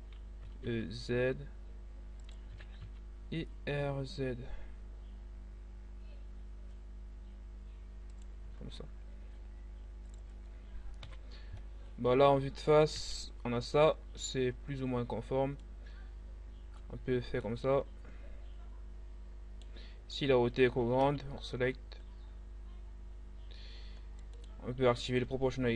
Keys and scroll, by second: 0.5 e, 0.7 z, 2.5 r, 2.7 z, 10.6 1, 12.9 z, 20.6 c.